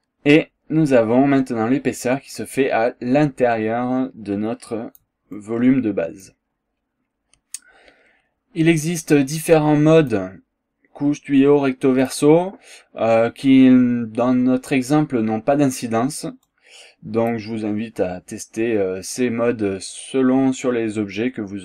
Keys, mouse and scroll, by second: 2.3 scroll down 1, 3.6-5.2 drag, 5.3 click, 10.0 click, 12.0 click, 14.1 scroll down 1, 16.5 click, 17.5 scroll down 2, 17.8 scroll up 2, 18.5 scroll up 2, 19.8 scroll down 2, 20.5 scroll up 2.